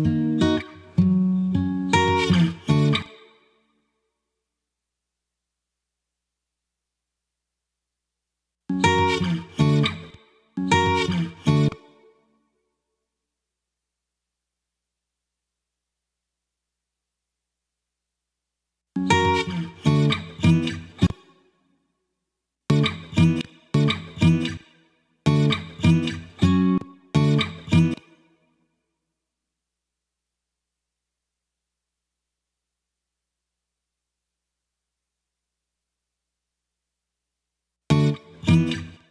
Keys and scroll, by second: 2.8 space, 8.4 space, 9.9 space, 11.5 space, 18.6 space, 20.9 space, 22.4 space, 26.6 space, 37.6 space, 38.8 space.